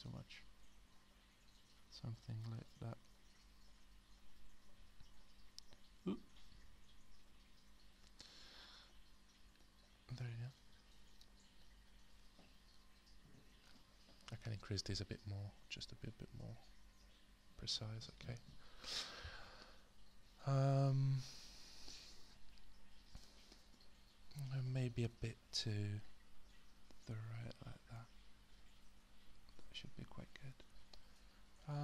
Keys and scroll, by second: 18.2 -, 25.0 alt+w.